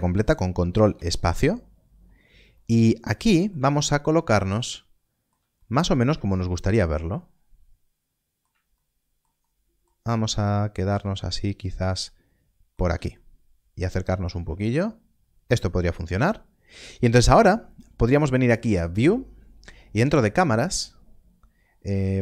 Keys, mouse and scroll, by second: 0.8 ctrl+space, 1.7 scroll up 1, 2.5 middle click, 3.7 shift+middle click, 5.5 middle click, 6.3 shift+middle click, 10.0 shift+middle click, 13.3 ctrl+middle click, 14.5 shift+middle click, 18.6 click.